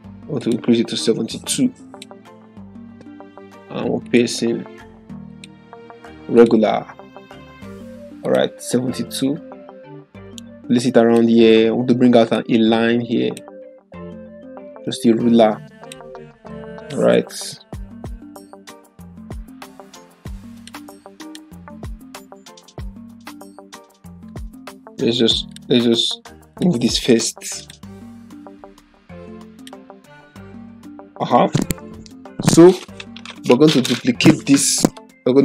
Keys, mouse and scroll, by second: 20.5 click, 25.5 click.